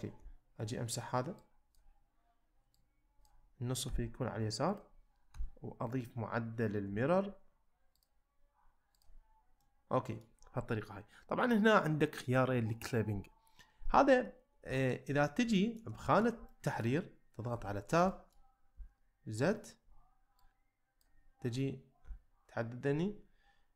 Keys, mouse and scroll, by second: 0.2 z, 1.5 click, 2.7 click, 3.9 x, 5.3 Tab, 6.9 z, 8.0-9.0 drag, 9.6-10.2 middle drag, 14.8 shift+middle drag, 15.6 shift+middle click, 16.0 shift+middle drag, 16.5-16.8 ctrl+middle drag, 17.5 Tab, 18.1 shift+middle click, 18.7 z, 20.5 click, 22.0 z.